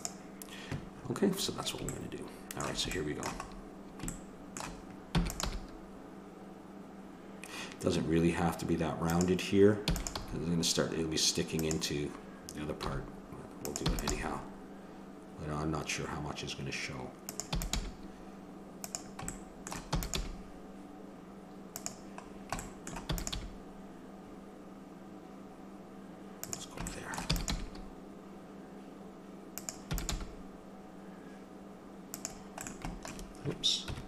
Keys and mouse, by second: 0.9 middle click, 1.9 middle click, 5.1 e, 5.5 g, 9.8 e, 10.2 g, 12.8 g, 13.8 e, 14.1 g, 17.6 e, 17.8 g, 19.3 click, 20.0 e, 20.2 g, 23.1 e, 23.4 g, 27.3 e, 27.5 g, 29.9 e, 30.1 g, 32.6 click, 33.8 KP_1.